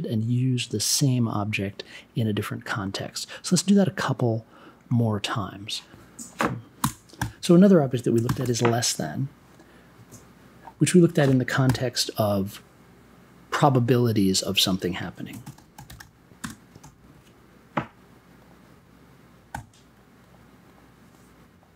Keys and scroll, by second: 6.8 BackSpace, 7.1 n, 8.2 shift+,, 11.6 n, 15.3 r, 16.4 space, 16.8 1, 19.5 b.